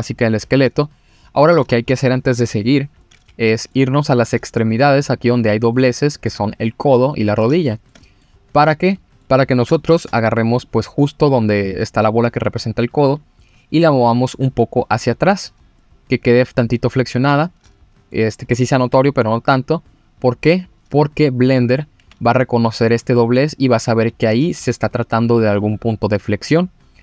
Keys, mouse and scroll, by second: 0.1-1.2 scroll down 1, 1.4-1.8 scroll up 2, 3.0 middle click, 4.0-4.4 scroll down 2, 5.3 click, 5.7 middle click, 7.5 shift+middle click, 8.0 middle click, 8.4 scroll up 2, 8.9 middle click, 9.7 shift+middle click, 10.5 click, 10.9-11.6 scroll up 2, 13.2 g, 15.2-15.5 scroll down 2, 15.8-18.1 middle drag, 15.8 scroll down 2, 18.4-18.8 scroll up 2, 18.9 g, 21.0 click, 22.0 g, 24.2 middle click, 25.6 click, 26.5 scroll down 2.